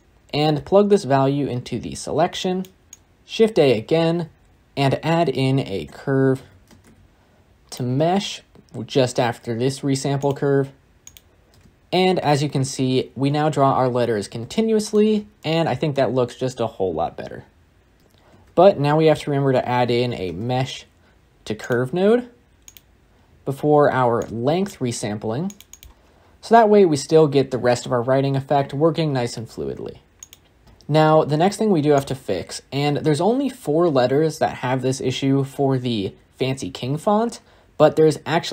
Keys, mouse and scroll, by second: 11.4 space, 13.9-14.4 scroll down 4, 14.4-17.8 shift+middle drag, 17.8 space, 18.0 x, 26.1 scroll down 1, 26.1-28.6 scroll up 1, 30.1 click, 30.6 space, 32.1-35.0 drag.